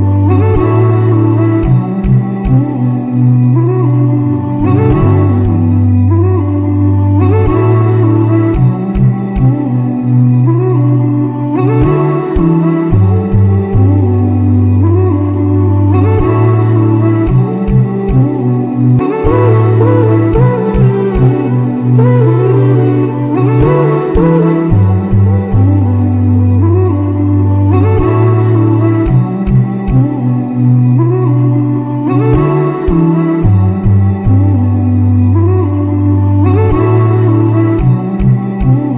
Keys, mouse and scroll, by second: 0.4 click, 1.3-1.9 middle drag, 1.9 shift+a, 5.8 s, 7.0-7.5 middle drag, 7.5 g, 9.7 drag, 10.7-11.6 drag, 11.6 0, 12.7-16.1 middle drag, 16.1 shift+a, 20.6-24.0 middle drag, 24.0 click, 25.5-26.2 drag, 26.8-27.4 drag, 28.0 middle click, 28.5 g, 31.9-33.8 drag, 33.8 KP_0, 38.0 click, 38.8-38.9 drag.